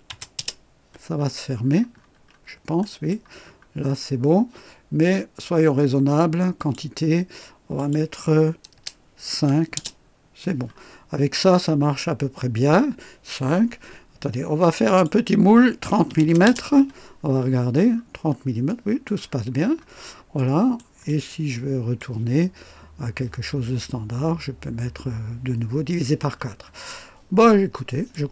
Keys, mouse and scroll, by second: 0.0 KP_0, 0.3 Return, 1.1-2.5 scroll down 4, 2.8 right click, 3.4-4.1 scroll up 2, 6.5 click, 7.7 click, 8.7 BackSpace, 9.3 KP_5, 9.7 Return, 10.6-11.0 scroll down 1, 14.8 click, 15.9 KP_3, 16.2 KP_0, 16.4 Return, 17.3-18.1 scroll up 2, 18.6 right click, 19.2-19.8 scroll down 2, 20.3-20.9 right drag, 21.0 click, 26.3-26.6 scroll down 1, 28.1 click.